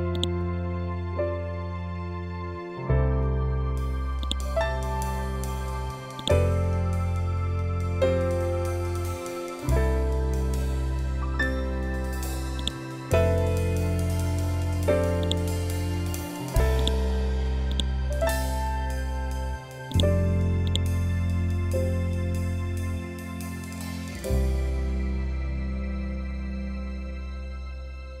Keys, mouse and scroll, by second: 4.1-6.1 drag, 6.7-7.4 scroll down 1, 9.0-9.5 scroll up 1, 12.5-24.8 drag.